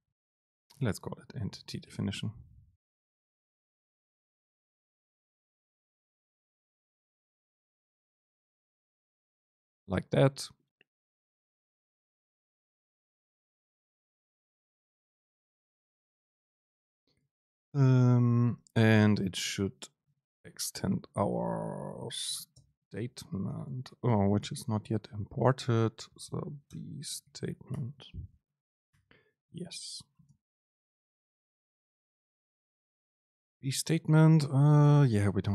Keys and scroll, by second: 1.8 BackSpace, 17.5 Down, 19.2 Down, 20.1 Up, 20.1 End, 20.6 ctrl+shift+super+Left, 22.7 super+space, 24.5 super+space, 24.6 ctrl+r, 30.4 super+space.